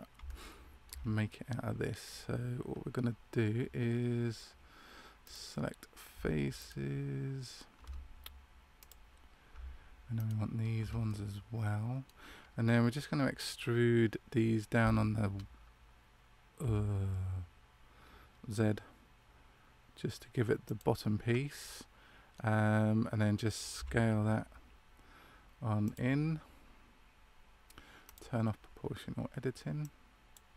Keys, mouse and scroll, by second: 0.1 scroll up 3, 0.2 shift+middle click, 1.2 middle click, 5.2 right click, 6.5 alt+shift+right click, 8.7 click, 10.1 alt+shift+right click, 11.0 middle click, 21.6 middle click, 23.7 s, 28.0 click.